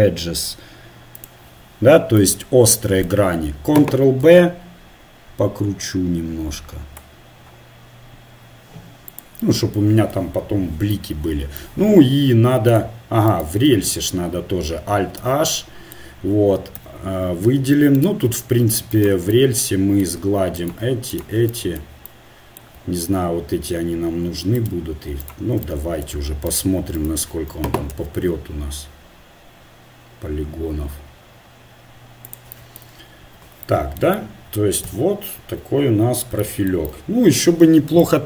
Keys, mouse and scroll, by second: 2.3-3.4 middle drag, 4.3 ctrl+b, 10.9 Tab, 13.3-15.1 drag, 13.7 Tab, 15.2 alt+h, 16.8 a, 17.9 right click, 18.8-22.3 middle drag, 27.9 ctrl+b, 33.2 Tab, 34.8 KP_1.